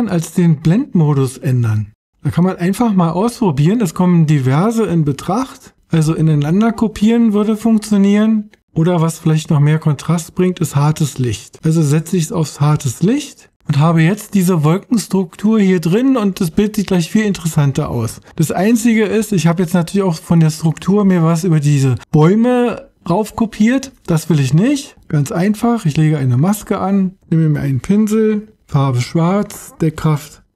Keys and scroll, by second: 27.3 b.